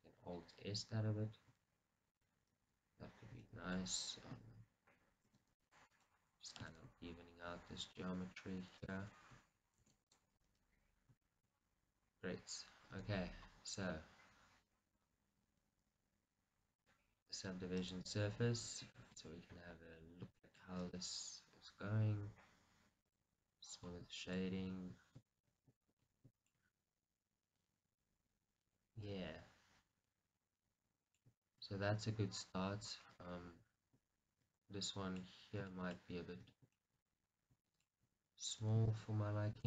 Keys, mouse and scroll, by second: 6.1 right click, 10.5 right click, 11.3-13.0 shift+middle drag, 13.0 Tab, 13.4-14.5 scroll down 2, 14.5-15.8 scroll down 1, 15.8-16.9 scroll down 1, 16.9-19.0 drag, 19.0-20.9 shift+middle drag, 19.5-20.1 scroll up 2, 20.1-20.5 scroll down 2, 20.9-24.3 right drag, 23.9-24.3 scroll down 2, 24.3-27.3 shift+middle drag, 27.6-28.0 scroll down 2, 28.0-29.6 middle drag, 31.8 scroll up 1, 32.7 KP_1, 34.8 middle click, 35.3 scroll up 1, 35.7 shift+middle click, 36.2 scroll up 1, 36.7 Tab, 36.9 shift+middle click, 37.5 scroll up 1, 37.8 shift+middle click, 38.5-39.6 alt+drag.